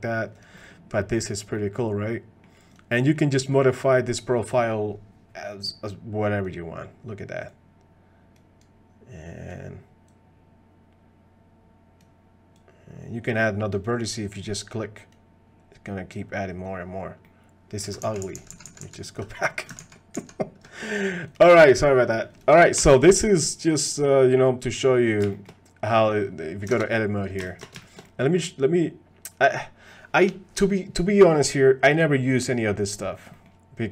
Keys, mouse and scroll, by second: 0.6 click, 1.0 click, 1.6-2.4 middle drag, 3.0 click, 3.4 middle click, 3.8 click, 5.9 click, 7.6 click, 8.6 click, 10.2-12.0 drag, 12.6 click, 14.2 click, 16.3 click, 17.2-17.8 drag, 17.2-17.8 middle drag, 18.2 ctrl+z, 18.5 ctrl+z, 18.6 ctrl+z, 19.2 ctrl+z, 19.8 ctrl+z, 20.1 ctrl+z, 21.8 click, 22.3 click, 22.8 shift+click, 23.1 click, 25.3 shift+click, 26.8 ctrl+Tab, 27.8 shift+click, 28.1 click, 33.3 click.